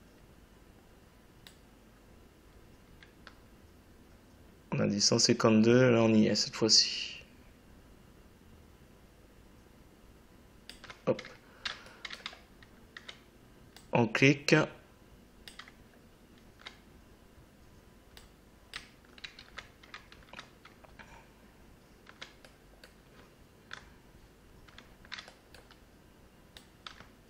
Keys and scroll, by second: 19.2 ctrl+z.